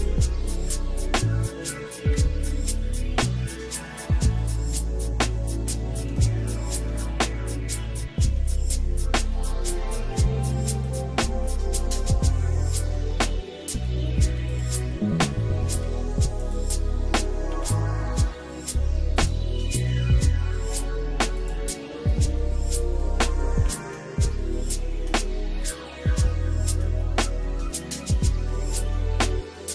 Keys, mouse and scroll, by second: 2.0 d, 3.0 middle click, 3.7 scroll down 1, 4.1 middle click, 5.5 Tab, 6.2 shift+middle click, 7.0-7.7 scroll up 4, 8.2 middle click, 8.8 shift+middle click, 10.9 click, 11.7 click, 12.7 shift+middle click, 13.1 Tab, 13.4-13.9 scroll down 2, 14.1 shift+middle click, 14.5 click, 15.7 g, 17.6 ctrl+s, 19.2 click, 19.9 middle click, 21.5 click, 24.3 shift+middle click, 25.7 scroll down 1, 26.3 shift+middle click, 27.0 middle click, 27.7 shift+middle click, 28.3 middle click, 29.0 shift+middle click.